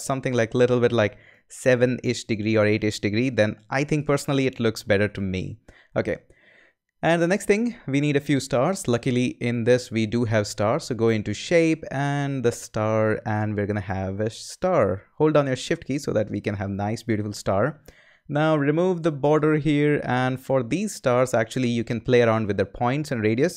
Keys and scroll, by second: 3.1 Return.